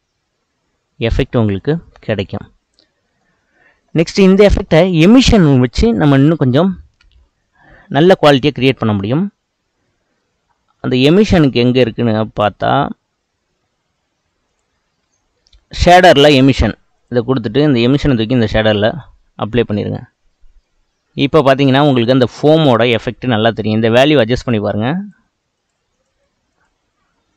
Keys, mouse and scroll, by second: 1.4-3.6 middle drag, 3.6-3.9 scroll down 2, 3.9-18.5 middle drag, 18.5-20.7 drag, 20.7-24.7 middle drag, 24.7-27.3 drag.